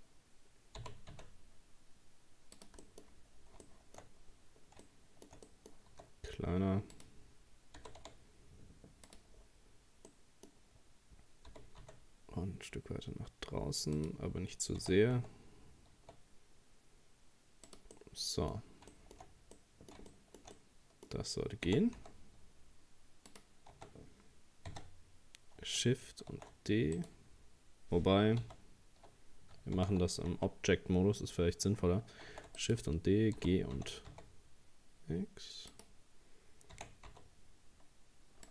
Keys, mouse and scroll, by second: 0.0-0.4 scroll down 1, 0.8 g, 2.8 middle click, 3.2-3.6 scroll up 2, 3.6 shift+middle click, 4.4-4.8 scroll up 2, 4.8 shift+middle click, 5.7 scroll up 1, 5.9 s, 7.8 g, 9.4-9.8 scroll down 1, 9.8 scroll up 1, 10.1-11.5 middle drag, 11.5 g, 14.8 r, 18.0-19.2 middle drag, 19.2-19.6 scroll up 2, 19.6-21.7 middle drag, 21.7 r, 23.7 Tab, 24.7 a, 26.3 shift+d, 28.4 ctrl+z, 29.8 ctrl+z, 30.3 Tab, 32.3 shift+d, 33.4 g, 36.7 r.